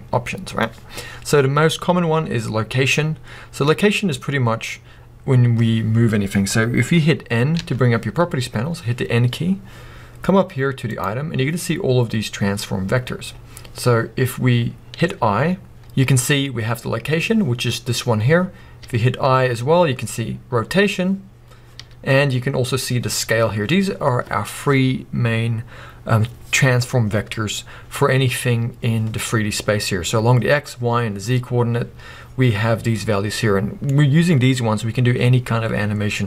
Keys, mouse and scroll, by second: 7.6 n, 10.9 click, 13.9 click, 28.4-28.9 scroll down 1, 33.4-36.2 middle drag.